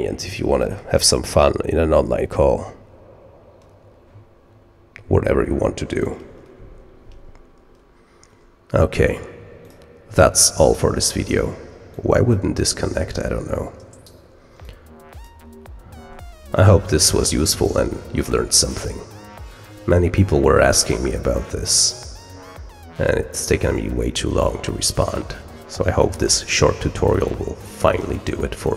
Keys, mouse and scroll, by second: 9.5 click, 10.3 middle click, 10.3-11.3 scroll up 3, 11.8 click, 14.6-15.2 drag.